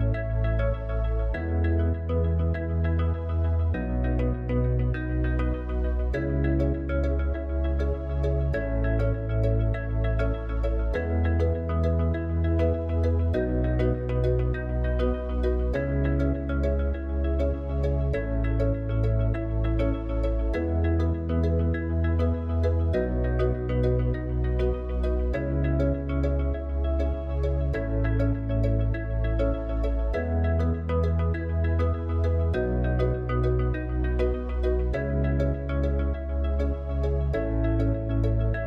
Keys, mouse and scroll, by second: 2.5 shift+a, 9.9-15.8 drag, 17.9 click, 22.9 s, 25.6 KP_7, 29.0 s, 31.6 click, 33.8 s, 36.7 click, 38.6 KP_1.